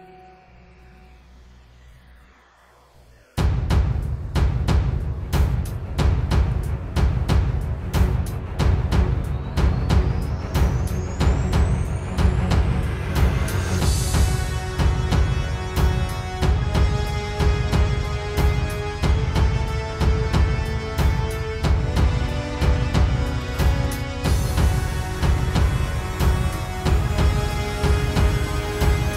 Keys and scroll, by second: 4.7 space, 6.5 super+z, 7.0 super+z, 19.1 space, 22.8 space, 23.7 super+space.